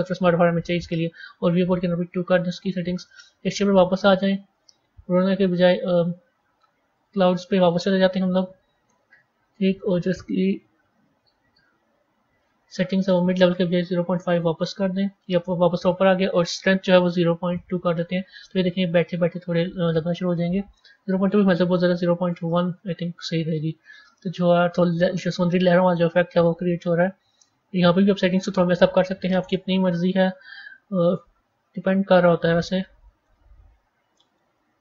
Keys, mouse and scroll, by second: 1.6-2.9 drag, 3.8-4.4 scroll up 3, 4.4-7.5 drag, 9.6 click, 12.9-15.9 drag, 16.3-18.3 drag, 18.3-21.1 middle drag, 21.1-23.0 drag, 23.0-23.9 scroll up 3, 23.9-26.8 middle drag, 26.8 click, 27.5-28.1 scroll down 4, 31.0-34.8 drag.